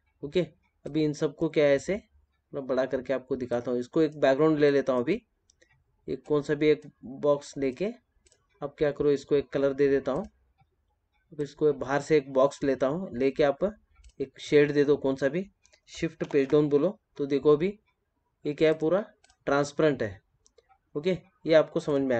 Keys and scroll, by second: 10.5 ctrl+z.